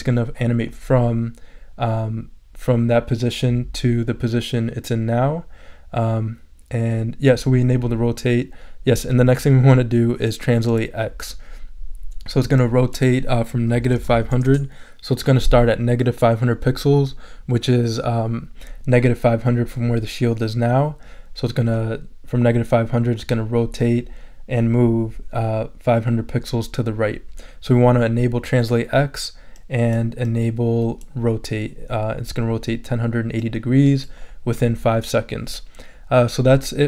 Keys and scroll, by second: 13.7-14.6 typing.